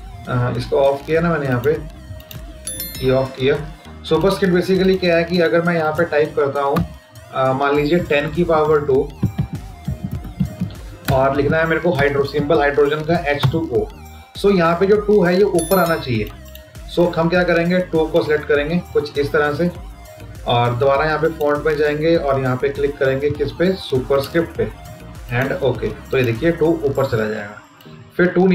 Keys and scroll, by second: 7.8 End, 8.1 Insert, 8.4 Down.